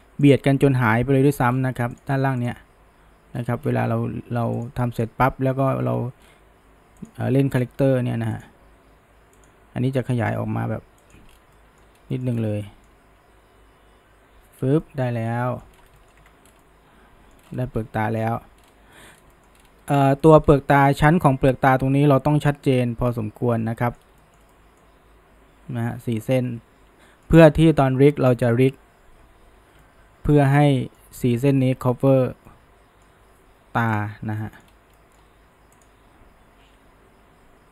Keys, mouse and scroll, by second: 0.3 click, 0.6 g, 2.4 drag, 2.7 g, 5.0 click, 5.4 g, 7.6 click, 7.9 g, 9.4 click, 10.1 g, 11.3 scroll, 11.6-12.0 middle drag, 12.0 scroll, 12.1 middle click, 12.3-12.7 scroll down 1, 12.7-14.6 middle drag, 14.6 scroll down 1, 14.8 middle click, 16.0 shift+middle click, 16.2 Tab, 16.5 scroll down 2, 16.6-17.4 middle drag, 17.4-18.0 scroll up 1, 18.0 middle drag, 18.3 Tab, 18.7 scroll up 1, 19.0 middle click, 19.2 scroll down 1, 19.4 middle drag, 19.6-20.7 scroll up 2, 20.2 middle click, 20.7-29.1 middle drag, 29.8-34.0 middle drag, 34.0 click, 34.4 shift+middle drag, 34.7 scroll up 1, 35.0-35.8 middle drag, 35.8 click, 36.8 g.